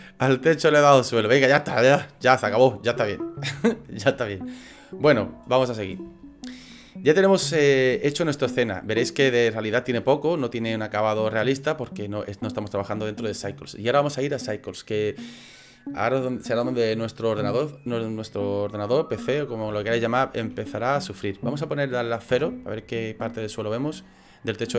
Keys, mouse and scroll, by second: 11.0 click, 11.0 scroll down 1, 11.7 middle click, 12.0 middle click, 20.0 shift+middle click, 22.3 KP_0.